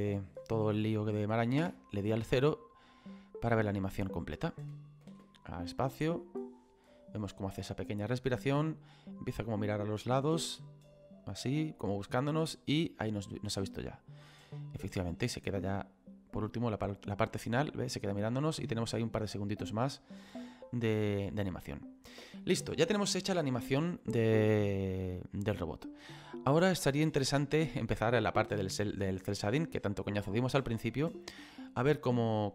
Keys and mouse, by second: 1.6 KP_0, 4.4 click, 5.1 space, 15.8 click, 22.1 space, 22.6 click, 29.7 click.